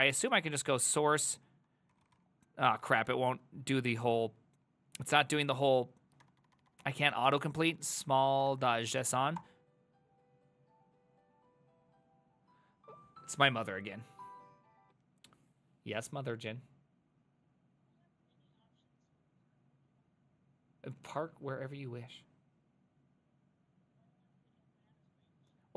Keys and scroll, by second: 0.0-3.6 typing, 0.9 Tab, 6.2 Tab, 6.4 Tab, 6.6 Tab, 6.7 Tab, 6.8 Tab, 7.4-9.6 typing.